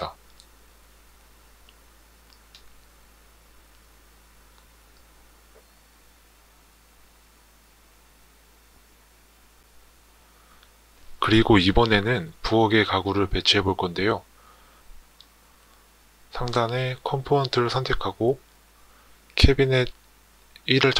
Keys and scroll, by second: 1.9 Tab.